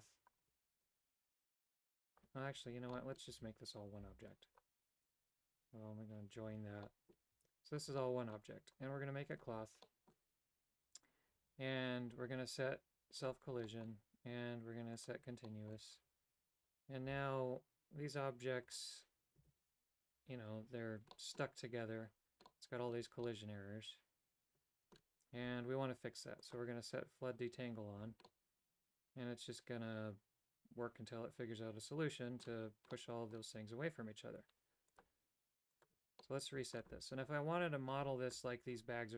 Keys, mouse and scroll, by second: 0.4-1.9 right drag, 2.9 middle click, 3.3 a, 4.0 b, 6.3 ctrl+j, 6.8 middle click, 7.3 Tab, 7.9 Tab, 8.0 middle click, 9.6 click, 9.8 middle click, 13.2 click, 13.6 middle click, 15.0 click, 15.5 middle click, 16.2 Tab, 16.7 right click, 17.2 g, 19.6 o, 21.2 middle click, 22.6 middle click, 23.4-25.1 middle drag, 26.7 click, 28.4-32.6 middle drag, 33.0 middle click, 35.7 click, 36.2 middle click.